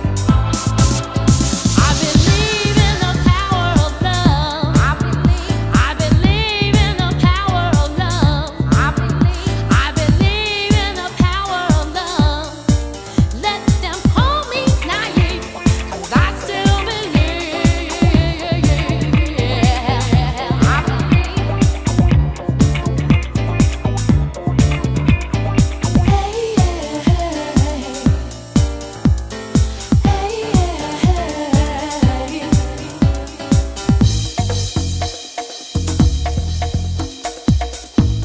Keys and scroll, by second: 2.0 super+Tab, 13.3 super+Tab.